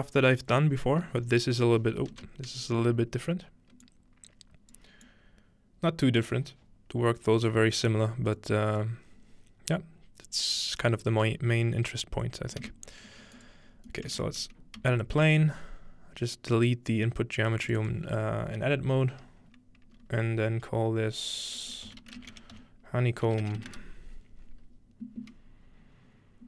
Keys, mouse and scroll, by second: 1.1 space, 2.1 space, 3.8-7.4 drag, 8.4 click, 9.2-9.8 scroll down 1, 9.8-10.1 scroll up 1, 12.3 scroll up 1, 12.6 shift+a, 13.4 shift+click, 14.2 Tab, 14.8 x, 15.0-16.6 drag, 15.5-17.3 scroll up 2, 17.7-19.8 drag, 21.9-24.2 typing.